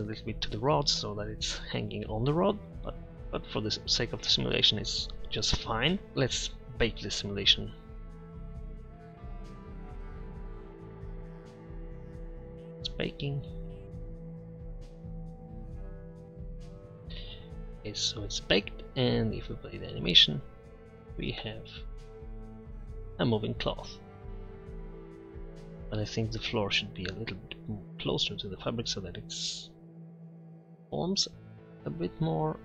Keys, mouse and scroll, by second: 3.6-4.0 scroll up 1, 6.1 Tab, 17.7-20.0 middle drag.